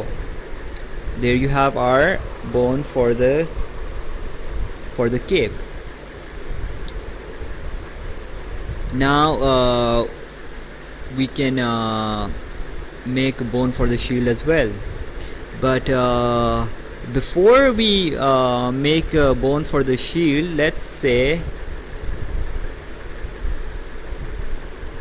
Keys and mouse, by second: 0.6 right click, 2.4 click, 3.7 click, 5.8 ctrl+z, 13.2 click, 16.3 right click.